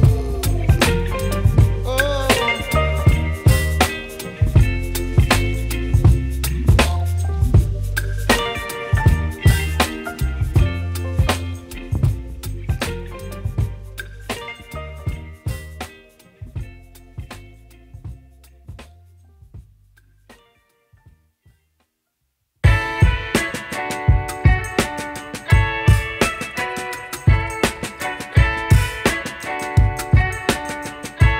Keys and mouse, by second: 0.0-2.0 typing, 0.1 click, 2.0 click, 3.0 typing, 5.2 click, 6.2 z, 7.0 click, 11.7 right click, 12.6 click, 13.6-24.8 typing, 14.7 click, 18.7 ctrl+z, 19.6 click, 21.1 click, 21.6 click, 22.3 click, 22.6 click, 23.2 click, 23.7 click, 24.4 click, 26.1-31.3 typing, 26.2 click, 26.6 click, 28.1 right click, 28.3 click, 28.5 click, 28.7 click, 29.3 right click, 29.6 click, 30.5 click, 30.9 click, 31.2 click.